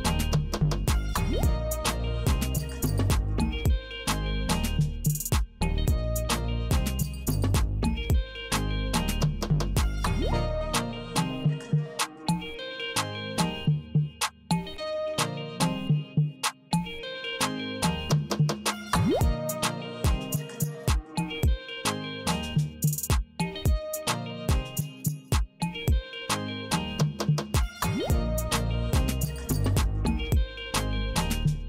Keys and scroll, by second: 0.1 w, 1.2 w, 2.4 w, 3.6 w, 4.9 w, 6.2 w, 7.5 w, 8.7 w, 9.9 w, 11.1 w, 12.3 w, 13.5 w, 14.7 w, 15.9 w, 17.1 w, 18.4 w, 19.6 w, 21.5 Right, 23.1 c, 24.8 Right, 26.3 w, 27.6 w, 28.6 w, 29.9 w.